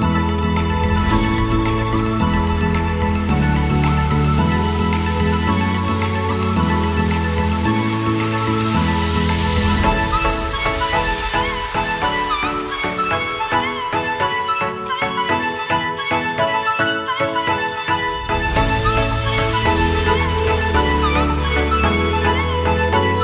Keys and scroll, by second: 3.9 shift+Page_Up, 5.0 shift+F2, 5.5 Escape, 7.2 Delete, 8.3 F3, 16.1 shift+F2.